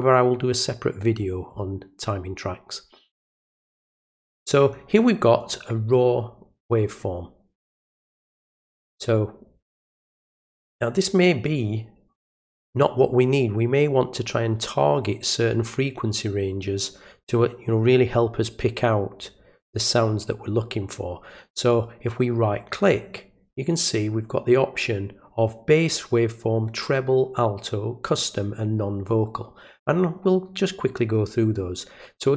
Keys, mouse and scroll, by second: 3.2-4.7 drag, 5.4 click, 8.4 click, 21.6 right click.